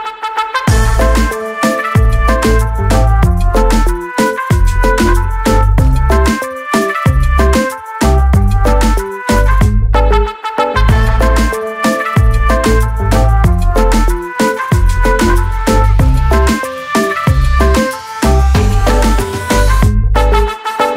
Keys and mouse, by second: 3.0 click, 4.7 click, 4.9 double click, 6.2 double click, 6.2 double click, 7.6 click, 9.0 click, 12.4 click, 13.9 click, 14.0 click, 15.4 click, 16.7 click, 19.1 click.